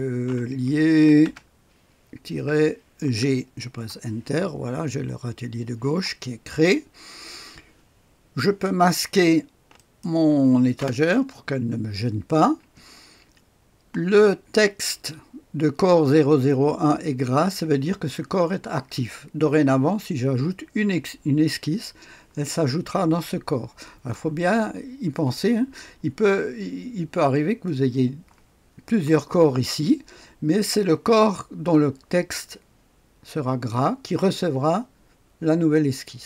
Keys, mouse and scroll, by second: 0.0-3.0 typing, 3.7 Return, 9.7 click, 10.8 space.